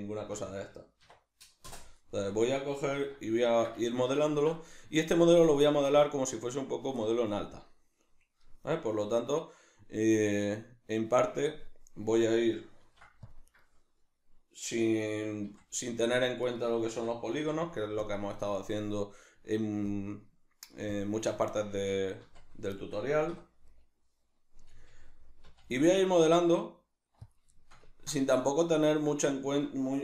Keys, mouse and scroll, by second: 2.9 alt+o, 13.6 right click, 15.4 v, 15.8 right click, 16.4 right click, 17.0 l, 18.8-21.0 drag, 21.7 Tab, 22.8 shift+middle click, 23.3 3, 23.6 right click, 24.7 g, 27.3 click, 27.6-30.0 ctrl+shift+middle drag.